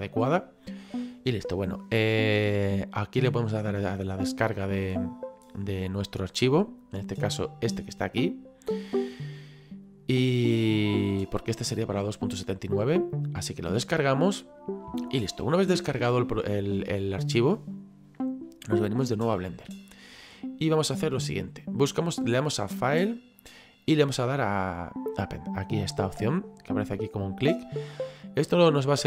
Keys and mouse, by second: 19.2 click, 22.9 click.